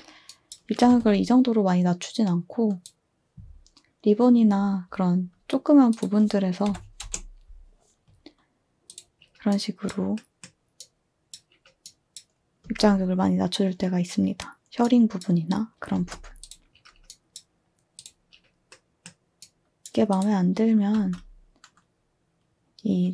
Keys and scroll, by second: 0.8 2, 6.6 5, 7.0 Return, 12.6 space, 15.9 space, 20.9 z.